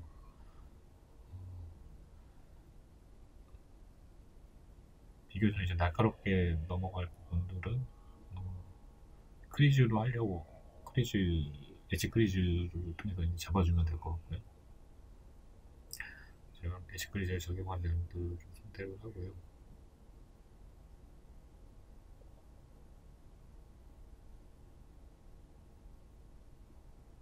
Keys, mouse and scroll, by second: 0.1 shift+right click, 0.7 shift+right click, 1.1 shift+right click, 1.5 shift+right click, 2.1-9.1 middle drag, 4.4 ctrl+b, 7.7 click, 9.1 ctrl+z, 9.8 shift+right click, 10.2 shift+right click, 10.7 shift+right click, 11.1 shift+right click, 11.5 shift+right click, 12.1 shift+right click, 12.6 shift+right click, 13.1 shift+right click, 13.7-15.9 middle drag, 14.8-15.1 scroll down 2, 15.9 shift+right click, 16.3 shift+right click, 16.7 shift+right click, 17.1 shift+right click, 17.7 shift+right click, 18.1 shift+right click, 18.5 right click, 18.8-21.9 middle drag, 21.9 shift+right click, 22.3-27.2 middle drag, 26.6-27.2 scroll up 2.